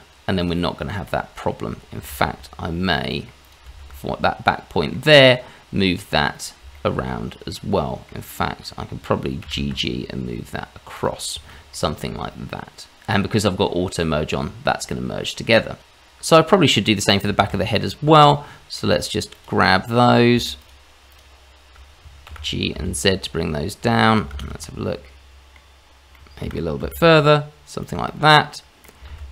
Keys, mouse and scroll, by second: 0.7-1.0 scroll up 1, 1.0 middle click, 1.9 shift+z, 3.1 middle click, 3.4 click, 3.7 shift+z, 4.2 middle click, 5.3-6.3 scroll down 1, 6.3-6.7 scroll up 2, 6.7 shift+middle click, 7.5 middle click, 9.4 g, 11.3-11.7 scroll down 2, 11.7 middle click, 14.6-15.2 scroll down 3, 15.2 middle click, 15.8 Tab, 17.0 scroll up 1, 17.4 shift+z, 18.3 middle click, 19.3 click, 19.9 middle click, 20.6 shift+click, 21.1 shift+click, 22.3 g, 24.3 shift+z, 24.6 middle click, 26.1 middle click, 26.4 g, 28.0 middle click, 29.1 shift+z.